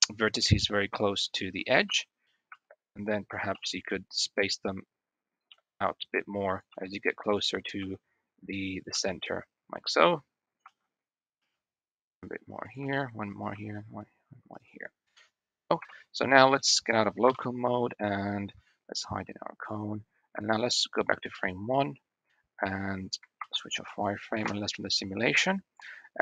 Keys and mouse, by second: 1.7 shift+r, 2.3 shift+r, 3.4 i, 5.4 i, 6.5 i, 7.7 i, 8.8-13.4 typing, 15.0 Tab, 15.7 KP_1, 16.5 shift+middle click, 16.6 shift+drag, 17.1 /, 20.3 shift+middle click, 21.3-21.6 middle drag, 23.2 alt+v, 24.2 space.